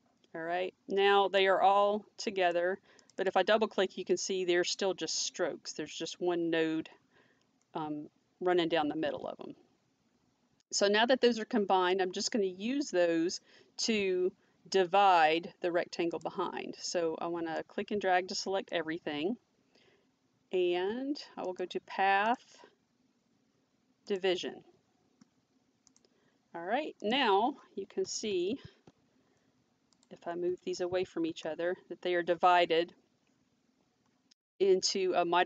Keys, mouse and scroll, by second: 1.4 click, 1.4 click, 3.0 click, 9.0 ctrl+z, 16.1 click, 17.6 click, 21.4 click, 22.2 click, 28.4 shift+l, 29.9 click, 30.8 shift+v.